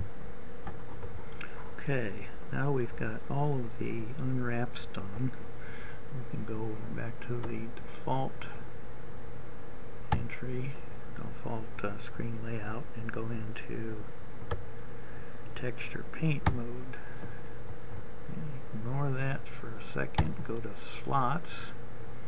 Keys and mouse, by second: 0.2 g, 4.6 click, 6.6-10.8 drag, 15.1 click.